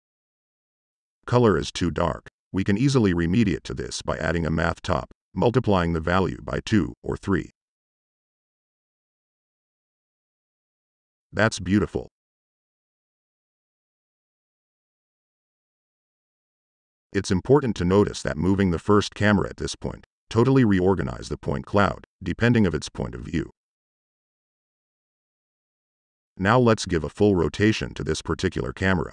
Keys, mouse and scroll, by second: 1.2 right click, 2.2-3.2 typing, 4.3 click, 6.0 click, 7.6 click, 10.6 right click, 11.0 click, 11.3 right drag, 11.6-12.5 right drag, 12.7 right click, 17.5 click, 18.1 click, 18.5 click, 19.3 click, 19.7 click, 20.1 click, 23.0 click, 23.6 click, 24.3 click, 25.0 click, 27.3 click, 27.7 click, 27.8 Tab, 28.1-28.9 typing.